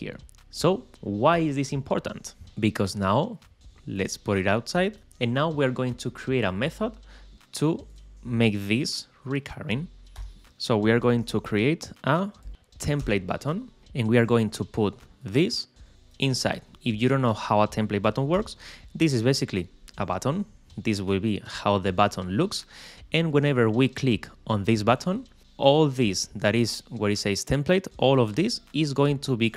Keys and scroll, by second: 10.4 shift+7, 11.3 shift+t.